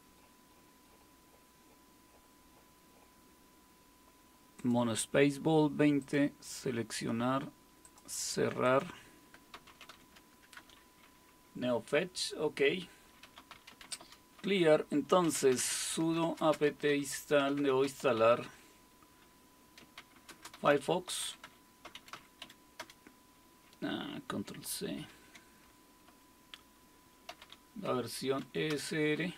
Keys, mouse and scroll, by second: 4.6 click, 6.0-9.3 drag, 9.3-10.4 typing, 10.6 Return, 13.0-23.3 typing, 24.9-28.4 typing, 28.7 Return.